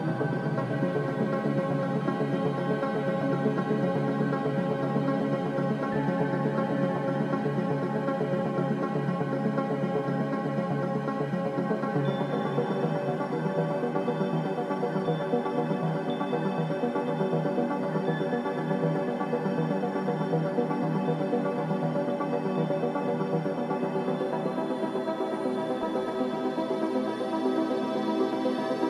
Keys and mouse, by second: 2.7 click, 3.2 Tab, 3.9 KP_0, 4.8 ctrl+s, 7.0 click, 7.8 click, 10.6-11.6 shift+middle drag, 12.3 click, 24.6 click, 27.5 shift+a.